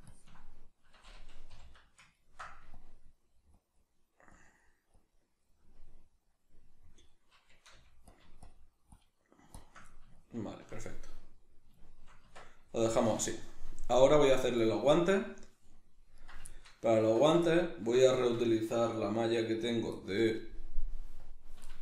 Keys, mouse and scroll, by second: 0.1-1.8 ctrl+drag, 1.5 g, 1.8-2.8 middle drag, 2.8-5.4 drag, 5.4-8.5 middle drag, 7.7 f, 8.5-9.9 shift+drag, 9.9-16.1 ctrl+middle drag, 12.2 Tab, 13.0 a, 16.1 right click, 16.5-19.5 shift+middle drag, 17.0 Tab, 19.5 right click, 20.0-21.8 middle drag, 21.3 click.